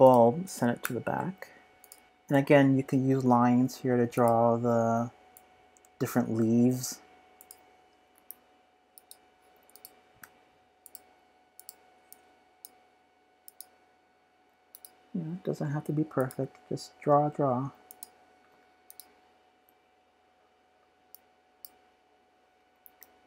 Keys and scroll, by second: 1.8-2.8 typing, 8.1 typing, 15.4 typing.